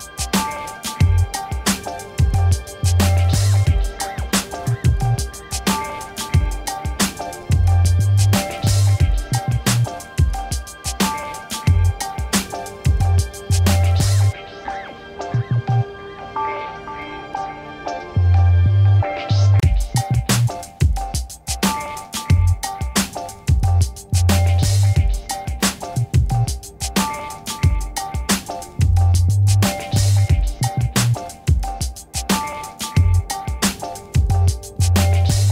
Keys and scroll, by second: 3.5 ctrl++, 4.0 space, 10.2 ctrl++, 10.6 space, 17.2 v, 18.6 alt+shift+Right, 19.2 Right, 20.3 alt+shift+Right, 20.8 shift+Right, 21.7 Left, 22.7 alt+shift+Right, 24.2 Left, 25.5 ctrl+-, 28.1 ctrl+e, 31.4 z, 32.8 shift+Up, 33.4 Up, 34.0 ctrl+-.